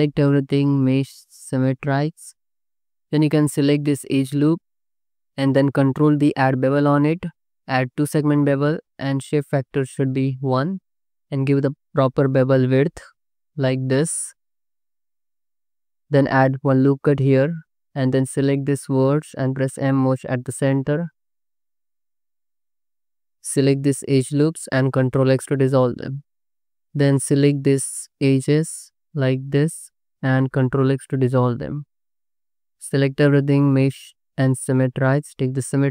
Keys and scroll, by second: 2.2 c, 2.7 2, 6.0 ctrl+b, 11.7 5, 15.0 3, 16.4 ctrl+r, 17.4 1, 19.4 m, 21.7 m, 22.9 m, 23.3 m, 23.5 2, 25.7 ctrl+x, 26.6 2, 28.2 ctrl+z, 30.6 ctrl+x, 32.6 a, 35.6 3.